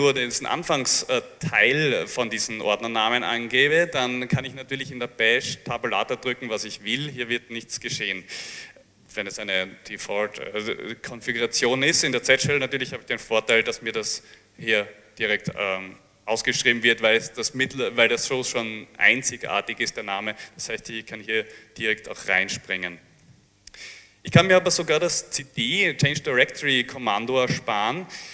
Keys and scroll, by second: 23.3 ctrl+c.